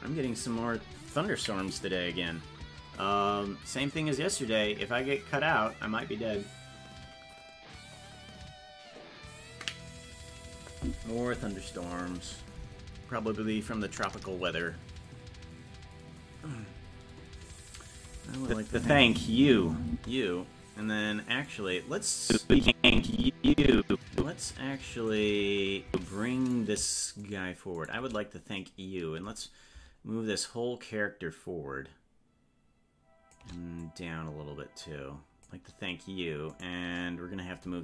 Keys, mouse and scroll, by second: 18.4 click, 18.7 space, 21.3 right click, 22.2-25.1 drag, 25.9 Left, 26.5 right click, 27.3 shift+right click, 30.4-33.3 shift+drag, 33.8-36.6 drag, 36.6 right click.